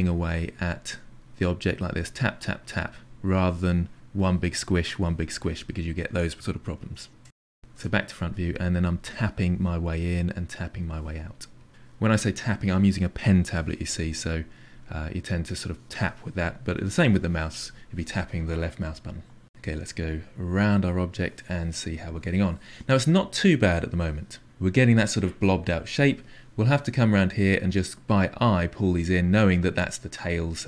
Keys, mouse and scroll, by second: 0.9 shift+click, 1.7 shift+click, 1.9 shift+click, 2.7 click, 3.3 click, 3.5 click, 4.5 click, 5.5 click, 5.9-7.3 middle drag, 7.3 ctrl+z, 7.6 ctrl+z, 7.9 middle click, 8.7 KP_1, 9.3 click, 9.5 click, 9.8 click, 10.0 click, 10.2 click, 10.5 click, 10.7 click, 10.9-12.0 drag, 12.1 click, 12.4 click, 12.8-19.5 drag, 19.5-25.0 middle drag, 27.2 click, 27.6-29.0 drag, 29.1 click, 29.8 middle click, 30.4 click.